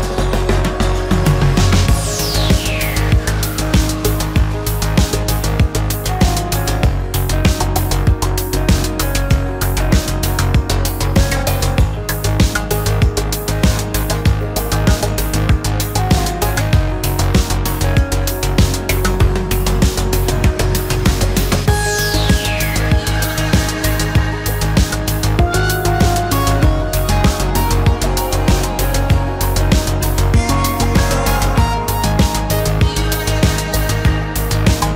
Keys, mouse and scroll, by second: 1.4 space, 1.5 Escape, 2.6 shift+middle click, 3.9 shift+double middle click, 4.7 shift+middle click, 4.9 shift+double middle click, 5.7 shift+double middle click, 9.1 shift+middle click, 9.6 shift+middle click, 9.7 shift+double middle click, 17.3 shift+middle click, 17.4 shift+double middle click, 17.8 space, 22.3 shift+middle click, 23.4 shift+middle click, 24.2 shift+middle click, 27.1 shift+middle click, 29.2 shift+middle click.